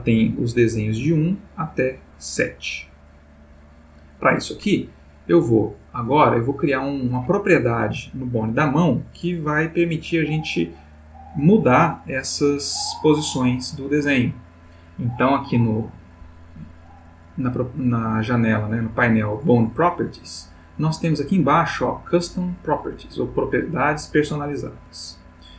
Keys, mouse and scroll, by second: 0.1-4.2 drag, 5.5 click, 20.2-21.0 middle drag, 24.6 click, 25.2 middle click.